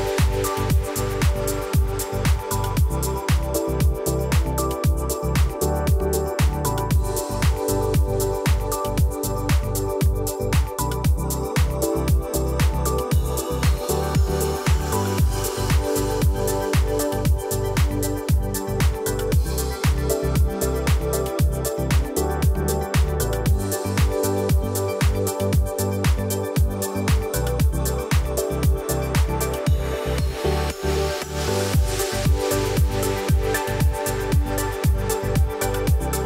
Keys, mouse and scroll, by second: 6.2 alt+scroll down 1, 6.7 click, 7.0 alt+scroll up 1, 9.0 click, 9.5 alt+scroll up 1, 10.3-11.3 drag, 11.8 alt+scroll up 1, 12.9 ctrl+a, 13.8 click, 13.9 click, 15.5 click, 18.3 click, 21.2 click, 25.1-31.2 drag.